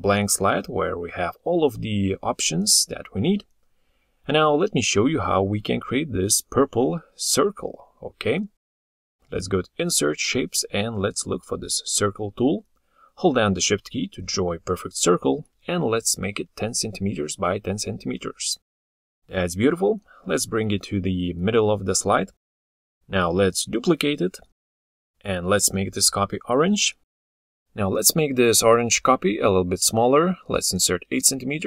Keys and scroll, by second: 24.6 ctrl+d.